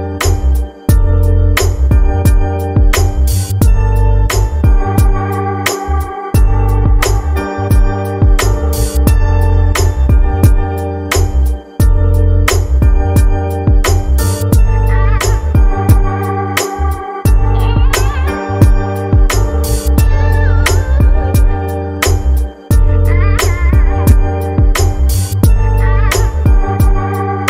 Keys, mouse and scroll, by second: 0.7-2.1 middle drag, 2.1 scroll up 3, 2.3-3.0 middle drag, 3.0 scroll up 1, 3.2-3.9 shift+middle drag, 3.9-4.5 scroll down 1, 4.5-5.7 middle drag, 5.7 click, 6.2 shift+middle click, 6.7 click, 7.4-8.1 middle drag, 9.2-9.9 shift+middle drag, 10.5-11.3 shift+middle drag, 11.3-16.8 drag, 16.8-18.4 scroll down 4, 18.4-19.3 scroll down 4, 19.3-20.9 drag, 20.9-23.3 scroll up 3, 23.3-24.9 drag, 23.3-24.9 scroll up 1.